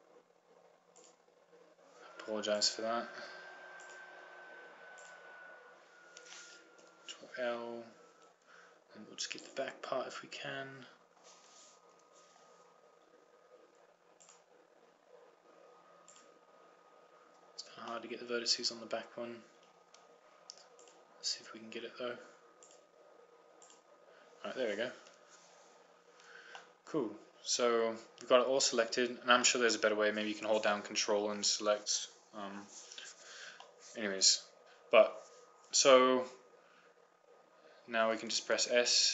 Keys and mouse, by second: 2.2-7.3 right drag, 7.9 ctrl+l, 10.5-11.7 right drag, 13.0 ctrl+l, 15.3 right click, 18.4-19.5 middle drag, 19.6 middle click, 21.9-23.0 drag, 23.8-26.0 drag, 26.0 ctrl+l, 28.4-31.2 middle drag, 32.1-33.8 middle drag, 34.3-36.0 middle drag.